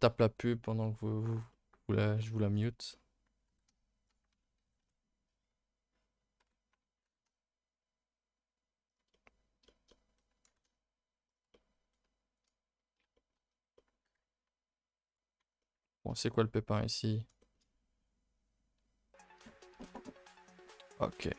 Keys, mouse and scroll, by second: 0.4-1.3 scroll down 1, 1.3 scroll down 1, 1.5-2.5 middle drag, 2.5-2.9 scroll up 2, 2.9 middle click, 3.5 g, 4.3 Escape, 4.6 s, 9.1-10.5 middle drag, 10.5 g, 11.5-13.4 middle drag, 13.4-13.7 scroll up 1, 13.7 middle click, 14.0 g, 15.6-17.6 middle drag, 17.6-19.7 scroll up 1, 19.7 a, 19.9 a.